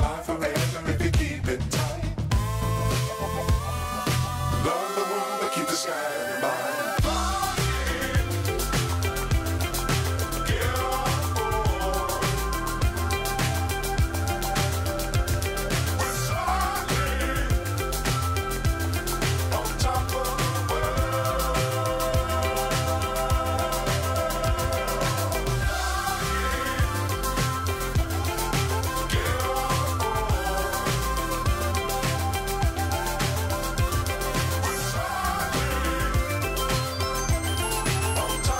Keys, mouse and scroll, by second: 2.0 click, 2.5 click, 5.6 click, 5.9 shift+d, 8.0 p, 13.4 Tab, 15.7 click, 18.5 click, 21.1 click, 25.8 click, 30.5 click, 32.4-34.1 scroll down 10, 34.1 scroll up 1, 34.2 scroll down 1, 34.8-35.7 scroll down 3, 36.0 click.